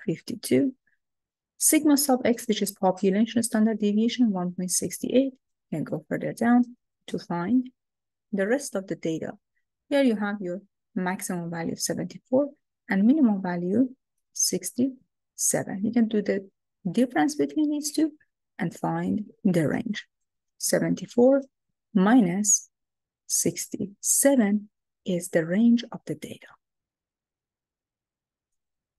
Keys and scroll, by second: 5.6 Down, 6.4 Down, 7.5 Down, 8.1 Down.